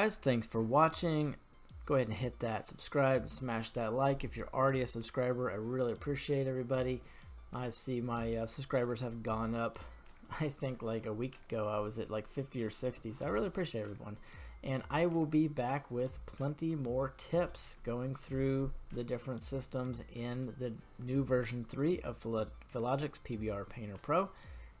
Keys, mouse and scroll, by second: 5.8-10.2 middle drag, 13.0 scroll down 1, 13.1-13.8 middle drag, 14.6 click, 15.3-16.0 middle drag, 17.7-18.3 scroll up 2, 19.9 middle click, 21.7-24.8 middle drag.